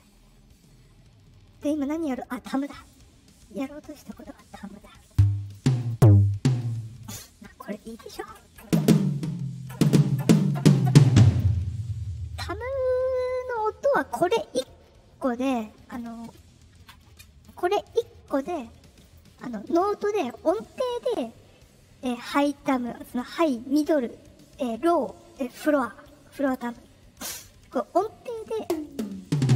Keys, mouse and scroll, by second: 2.7 click, 4.0 click, 5.0 click, 5.4 click, 5.7 click, 6.2 click, 19.0 click, 28.5 click, 28.8 click, 29.2 click, 29.3 click, 29.5 click.